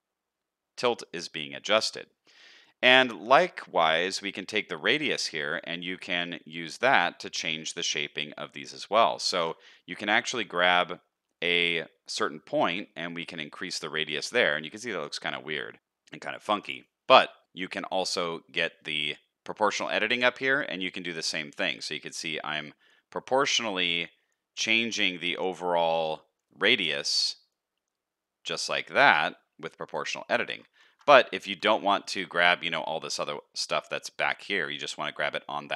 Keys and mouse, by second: 9.3 ctrl+z, 10.7 shift+middle click, 16.3 ctrl+z, 18.5-30.6 drag, 30.8 ctrl+z, 32.6 middle click, 34.9 middle click.